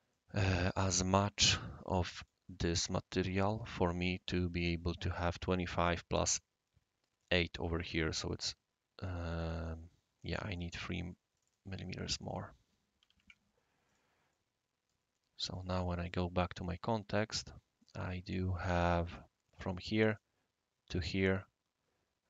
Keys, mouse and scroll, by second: 0.1-0.6 right drag, 2.2 click, 2.7-3.3 right drag, 3.7 click, 10.3 click, 10.6 right click, 11.3 click, 12.2 click, 13.0 8, 13.2 Tab, 13.8 click, 14.3-14.9 right drag, 15.5 click, 16.0 click, 16.9 right click, 17.8 right click, 18.8 click, 19.1-19.5 drag, 19.1-20.5 right drag, 20.1 click.